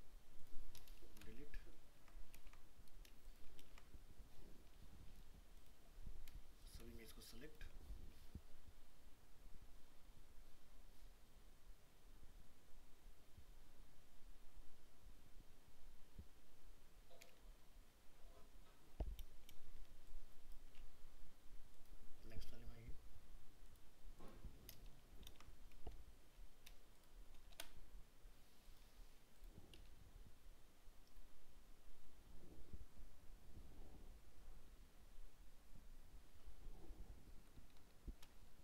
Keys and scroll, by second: 2.4 ctrl+z, 25.3 ctrl+v.